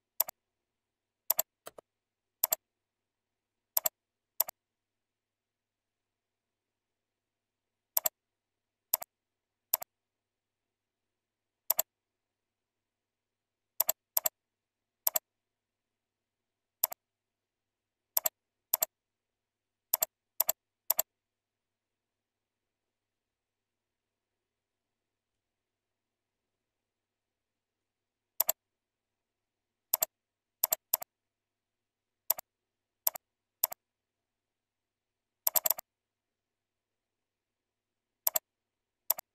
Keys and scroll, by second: 11.2 ctrl+z, 14.4 ctrl+a, 25.3 ctrl+a, 27.8 ctrl+b.